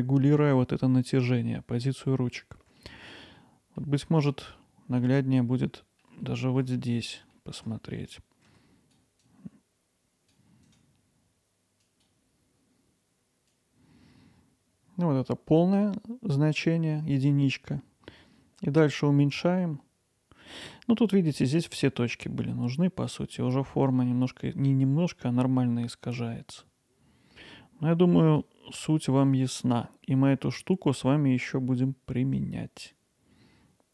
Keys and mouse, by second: 1.9 middle click, 2.8 click, 2.9 middle click, 3.4 middle click, 4.0 Tab, 4.4 middle click, 5.0 click, 5.6-6.0 middle drag, 6.2-6.6 middle drag, 7.4 ctrl+alt+middle click, 8.5 Tab, 9.4-10.8 drag, 10.8-13.6 right drag, 13.6-29.3 drag, 32.4-33.9 drag.